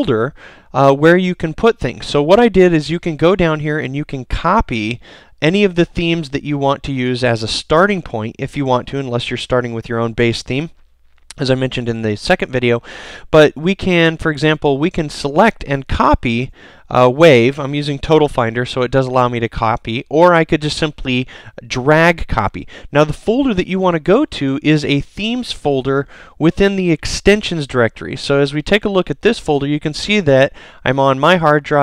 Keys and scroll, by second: 16.3 super+c, 17.5 super+c.